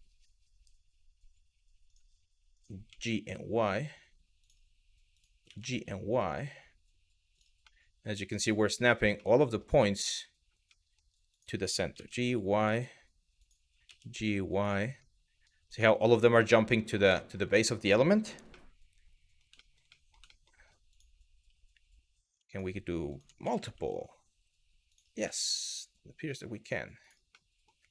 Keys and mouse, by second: 1.5 click, 2.2 click, 2.5 g, 2.8 y, 4.0 click, 4.8 click, 5.1 g, 7.0 click, 7.3-8.4 middle drag, 8.8 middle click, 9.5 middle click, 10.3 middle click, 11.0 click, 11.6 g, 11.8 y, 12.4 click, 13.0 click, 13.5 g, 14.2 click, 14.7 middle click, 15.5 middle click, 16.1 middle click, 16.8 shift+middle click, 17.1 middle click, 18.1 middle click, 19.2 shift+middle click, 19.6 middle click, 20.0 shift+middle click, 22.1 shift+click, 23.0 g, 23.3 y, 24.5 click, 25.0 middle click, 27.0 middle click, 27.7 g.